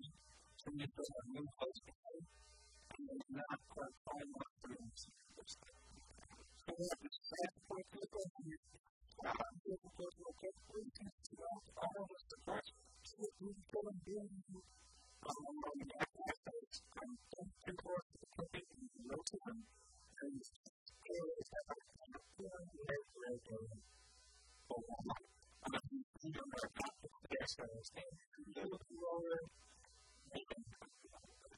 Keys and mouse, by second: 1.1-2.9 drag, 2.5 a, 2.5 b, 3.4-6.6 drag, 4.0 a, 4.2 b, 5.7 a, 6.0 Tab, 6.7-9.7 middle drag, 7.7 KP_1, 9.7 Tab, 10.1 a, 10.3 a, 10.5 b, 11.1 b, 13.1 shift+d, 15.8-17.3 right drag, 15.8 g, 16.6-18.1 drag, 16.9 g, 18.6 r, 19.5-21.3 drag, 20.2 s, 21.5 g, 23.0 click, 23.0 s, 23.9 g, 24.5 click, 24.9 KP_3, 25.5 middle click, 27.3-29.2 drag, 29.2 middle click, 29.9-31.5 drag.